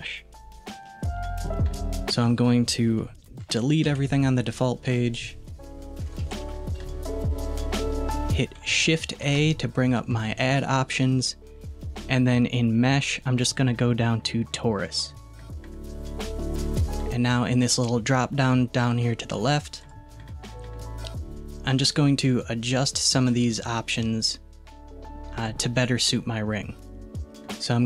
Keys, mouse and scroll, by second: 5.1 click, 6.3 a, 6.5 Delete, 9.2 shift+a, 19.8-22.8 drag.